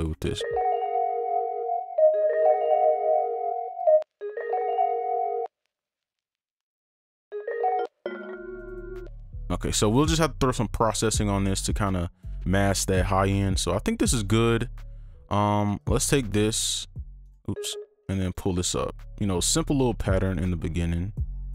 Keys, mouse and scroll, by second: 0.2 space, 1.2 ctrl+a, 2.0 right click, 4.0 space, 4.2 space, 4.5 right click, 5.1 click, 5.4 ctrl+space, 5.8 click, 6.9 ctrl+a, 7.2 Down, 7.3 space, 7.8 ctrl+Down, 7.8 space, 8.7 ctrl+right click, 9.0 space, 9.8 scroll up 1, 13.2 right click, 15.8 ctrl+click, 16.0 shift+click, 17.2 right click, 18.2 ctrl+click, 18.5 ctrl+Up, 19.7 alt+click.